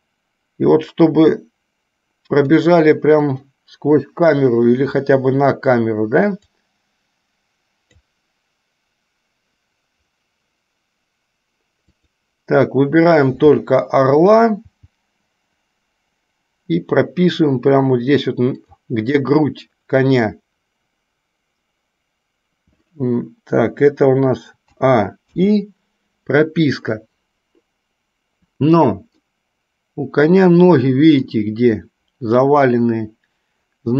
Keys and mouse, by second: 0.0-2.9 drag, 6.7-8.1 drag, 12.0 click, 14.7 g, 24.9 a, 25.5 i, 29.4-31.5 middle drag.